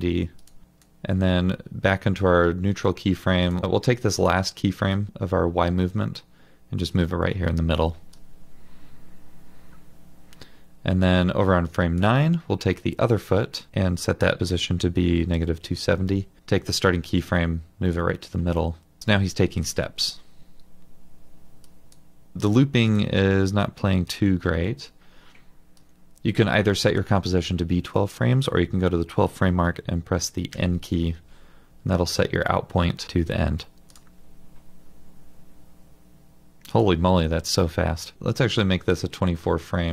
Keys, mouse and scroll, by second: 13.7 typing, 14.9-15.7 typing, 19.6 double click, 30.5 typing, 38.2-39.1 scroll.